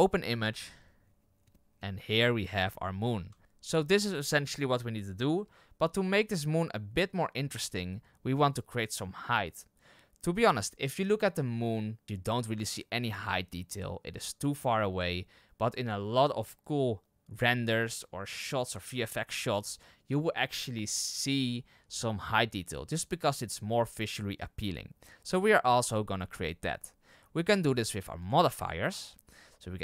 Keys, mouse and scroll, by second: 2.3-2.7 scroll up 6, 3.3 shift+middle click, 3.4 click.